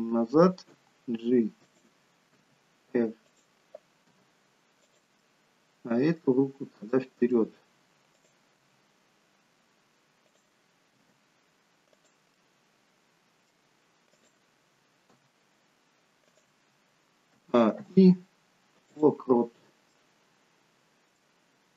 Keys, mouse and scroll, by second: 0.7 g, 2.4 r, 4.0 g, 5.1 scroll up 1, 5.3 middle click, 6.4-7.3 scroll down 2, 6.9 middle click, 8.1 click, 8.6 g, 10.9 r, 12.3 middle click, 14.1 click, 15.1 g, 17.4 a, 17.8 i, 19.5-21.7 scroll down 3, 19.9 middle click.